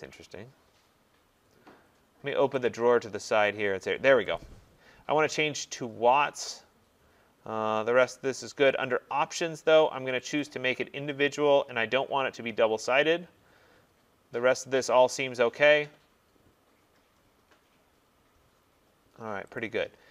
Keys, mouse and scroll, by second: 2.7 click, 4.4 click, 5.8 click, 8.9 click, 10.4 click, 19.6 click.